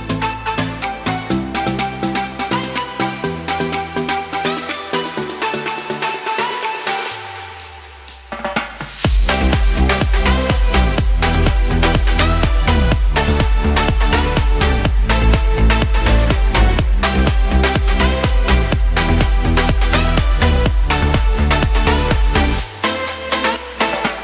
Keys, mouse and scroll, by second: 3.1 right click, 10.3 ctrl+alt+shift+z, 19.7 x.